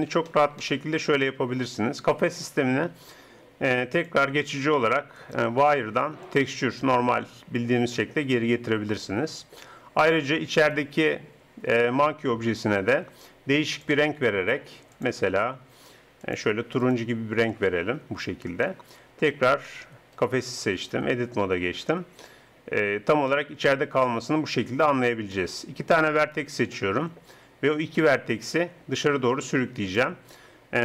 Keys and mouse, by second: 4.0 click, 4.3-7.0 middle drag, 10.6-12.5 right drag, 13.7-18.8 drag, 18.8 middle click, 20.2 right click, 21.0 Tab, 24.8-27.9 drag, 28.1-29.7 drag.